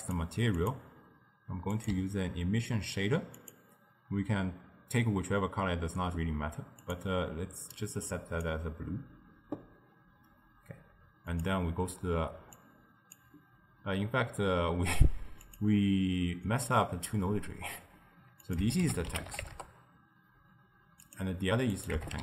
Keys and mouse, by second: 6.9 click, 11.4 click, 12.6 click, 15.5 click, 18.5-21.2 drag, 21.8-22.2 drag.